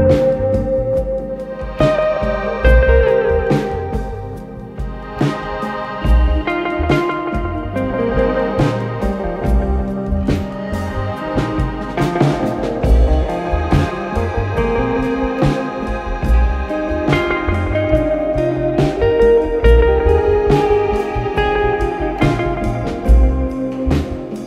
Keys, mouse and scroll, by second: 1.3 click, 1.4-2.2 typing, 3.8 click, 5.3 click, 5.5 click, 5.7 1, 6.0 Tab, 10.0 click, 11.1 click, 11.3 alt+click, 12.0 alt+click, 12.3-14.9 alt+drag, 14.9 alt+middle click, 16.9 click, 17.6-18.2 typing, 20.6 click.